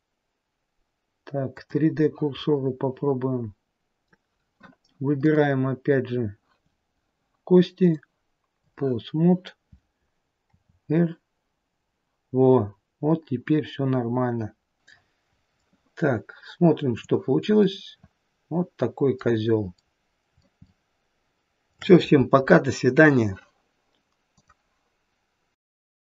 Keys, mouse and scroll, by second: 2.7 middle click, 5.5 click, 8.1 click, 10.7 r.